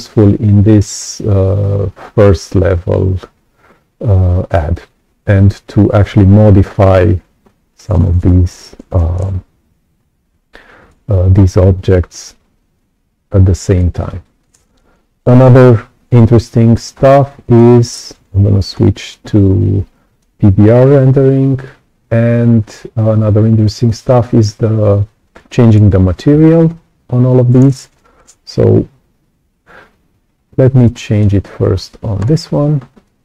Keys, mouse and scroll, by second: 6.7 click, 7.4 right click, 12.7-14.4 alt+drag, 16.2 right click, 16.9-17.2 scroll up 2, 17.4 right click, 18.8 r, 19.9 right click, 23.8 click, 24.8-25.2 scroll down 1, 25.4 right click, 26.4-26.7 scroll up 1, 30.3-30.8 scroll down 1, 30.8 right click, 32.1 click, 33.0 click.